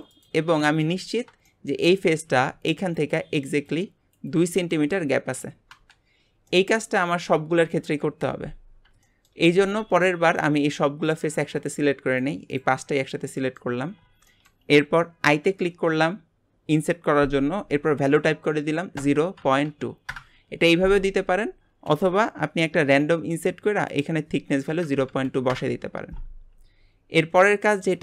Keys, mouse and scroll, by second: 0.6 shift+middle click, 1.0 scroll up 4, 1.4 shift+middle click, 1.8 scroll up 2, 6.1-6.5 scroll down 4, 6.5 middle click, 6.9 scroll down 2, 7.8 KP_1, 8.7 scroll down 3, 9.0 shift+middle click, 10.0 scroll up 2, 10.3 click, 11.0 shift+click, 11.5 shift+click, 12.1 shift+click, 12.5 shift+click, 13.0 shift+middle click, 13.8 scroll up 2, 14.3-15.4 shift+middle drag, 15.4 typing, 23.9-26.9 drag, 27.5 shift+middle click.